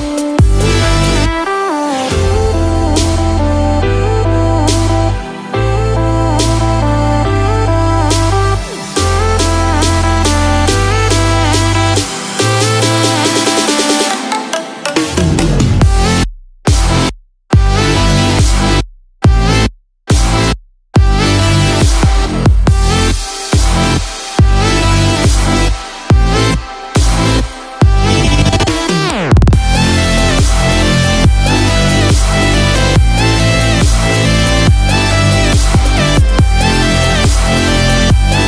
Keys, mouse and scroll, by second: 1.6 scroll up 1, 2.1-3.0 scroll down 1, 3.0 Tab, 3.7-4.9 scroll up 1, 4.9-5.4 scroll down 1, 11.3 ctrl+click, 12.2-12.9 scroll up 1, 12.9-13.3 scroll down 1, 21.4 scroll up 1, 22.2-23.4 scroll down 1, 23.4 click, 25.0 click, 27.8 click.